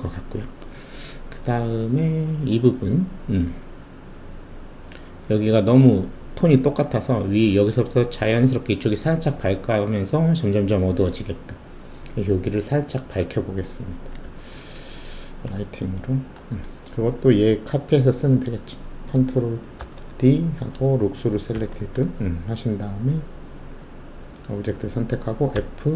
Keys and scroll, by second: 13.8 w, 19.7 ctrl+d, 21.5 alt+shift+z, 25.6 f.